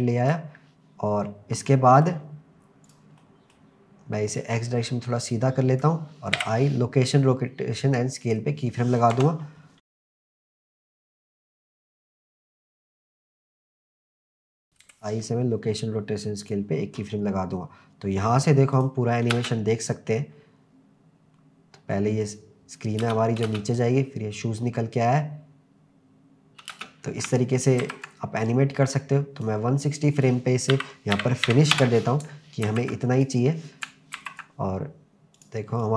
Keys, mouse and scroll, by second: 1.6-2.1 middle drag, 2.9 drag, 3.2-3.6 middle drag, 4.4 click, 4.6 click, 9.1 KP_0, 10.0-10.7 drag, 11.1 click, 12.0 click, 12.2 drag, 12.6 click, 12.8 drag, 13.8 ctrl+z, 13.9 click, 14.3 click, 14.8 i, 18.7 click, 19.3 space, 23.1 space, 23.5 space, 27.9 ctrl+s, 28.5-29.5 drag, 30.1-31.7 drag, 32.7 ctrl+s, 33.1 click, 34.2 ctrl+s, 35.4 click, 35.8-35.9 drag.